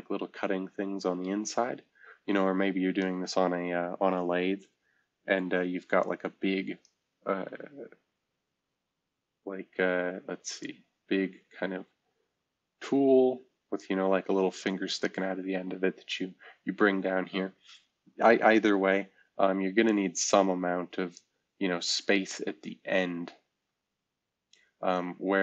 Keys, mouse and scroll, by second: 10.6-12.8 shift+middle drag.